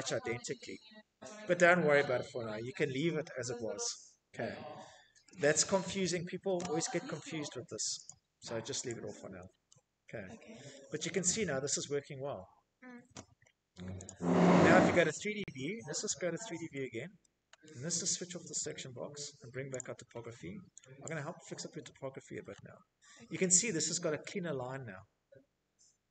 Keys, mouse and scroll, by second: 2.9 middle click, 3.4-4.3 typing, 6.4 click, 7.2 click, 7.4 g, 7.8-8.5 scroll, 7.9 Escape, 8.4 Escape, 9.3 middle click, 9.5 middle click, 9.9 middle click, 9.9 middle click, 10.1 middle click, 11.3 Escape, 12.4 right click, 13.1 click, 13.3-14.1 scroll, 15.6 shift+middle click, 15.8 middle click, 15.8-16.2 scroll, 17.0 shift+middle click, 18.1 click, 19.4 click, 20.8 middle click, 21.5-21.9 scroll, 23.1 scroll, 25.7 middle click.